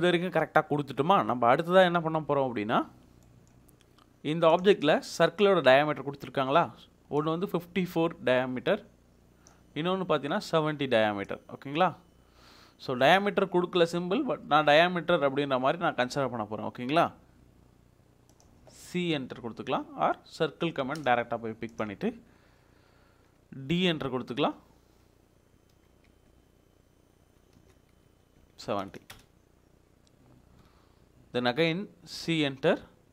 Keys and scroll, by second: 23.9 f, 25.7-26.6 typing, 27.5 Return, 28.5-29.3 typing, 32.7 d.